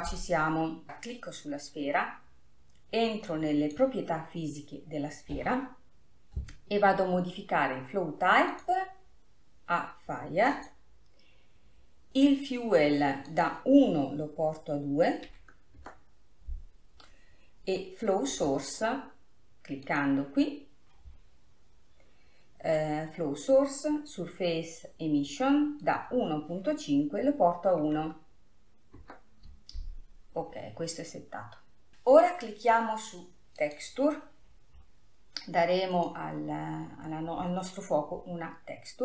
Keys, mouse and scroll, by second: 0.9 click, 3.4-6.6 drag, 8.8-11.8 drag, 13.5-16.6 drag, 18.7 scroll down 2, 20.0-21.3 drag, 21.3-22.6 scroll down 2, 22.6-23.3 scroll down 1, 23.3-24.8 scroll down 1, 26.0-29.1 drag, 32.3-34.1 scroll down 3, 34.1 click, 34.9 scroll down 2, 36.4-36.9 drag, 36.9 scroll down 4.